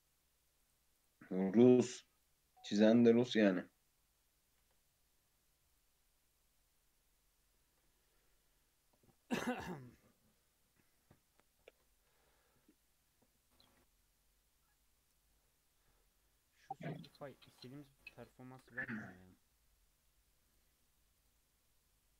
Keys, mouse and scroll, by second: 0.9 click, 1.2 middle drag, 1.5-1.8 scroll up 2, 1.8 middle click, 2.3 scroll up 1, 2.3-2.9 middle drag, 2.9-3.4 scroll up 2, 3.4-4.7 middle drag, 4.7 Tab, 5.1-5.5 scroll up 1, 5.5 Tab, 5.7 click, 5.9 Tab, 6.4-9.5 middle drag, 11.6 Tab, 12.1 /, 17.7 middle drag, 17.9-18.4 scroll up 2, 18.4 ctrl+a, 18.9 click, 19.3-20.4 middle drag, 20.4 click, 20.8 middle click, 21.2 click, 21.4-21.9 scroll up 2, 21.9 middle click.